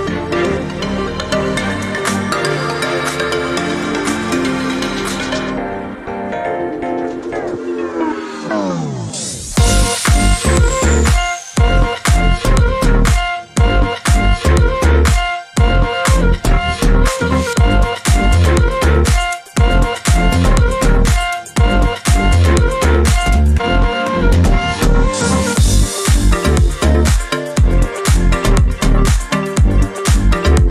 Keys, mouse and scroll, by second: 0.8 ctrl+scroll up 2, 4.3 click, 6.1 ctrl+shift+g, 6.8 ctrl+shift+click, 7.6 ctrl+shift+click, 8.7 Delete, 10.0 click, 10.7-13.5 ctrl+drag, 13.8 ctrl+shift+click, 16.7 ctrl+shift+KP_Add, 18.0-19.6 ctrl+drag, 19.9 ctrl+shift+click, 20.9 ctrl+shift+click, 21.4 shift+click, 22.1 ctrl+shift+click, 23.5 ctrl+shift+click, 24.6 ctrl+-, 27.7 click, 28.8 ctrl+y, 30.4 click.